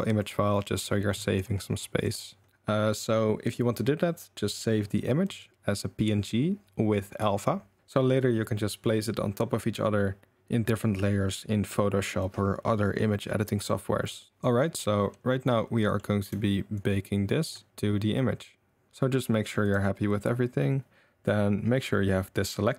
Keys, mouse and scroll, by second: 0.2-1.4 drag, 2.9-4.5 drag, 14.4 ctrl+s, 14.4 Tab, 15.8 middle click, 16.7 shift+click, 17.7-18.9 shift+drag, 18.9 ctrl+s, 19.3 click.